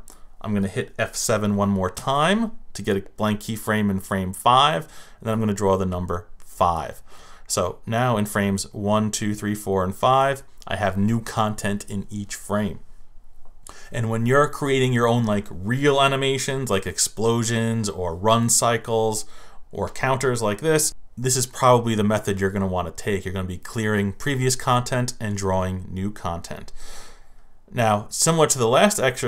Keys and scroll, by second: 1.9 F7.